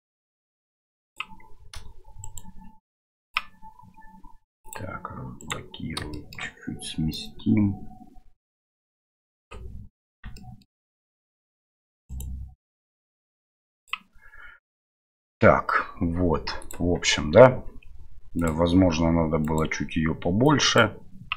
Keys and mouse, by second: 2.2-3.3 right drag, 3.3 click, 4.6 click, 5.4 right click, 6.1 shift+middle drag, 7.1-9.4 drag, 10.4 shift+middle click, 12.1 right click, 16.6 click, 18.4 click, 19.4 click, 20.5 click.